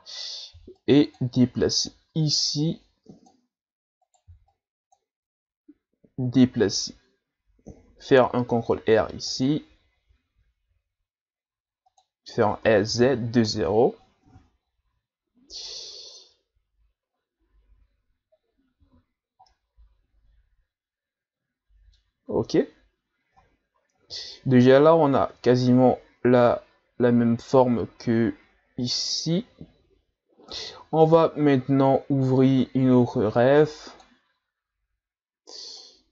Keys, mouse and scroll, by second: 0.5 b, 1.9-4.0 drag, 4.0 right click, 4.3 b, 8.7 ctrl+r, 12.6 s, 14.6-17.2 ctrl+scroll up 1, 18.9 z, 19.5-22.5 middle drag, 33.5-36.1 drag.